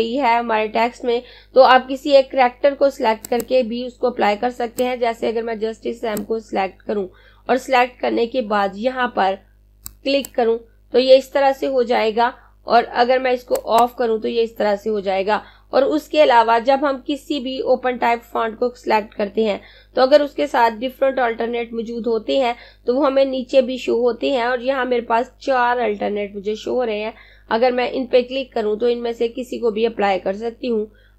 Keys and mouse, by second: 3.0 click, 9.5 click, 12.9 click, 30.4 click.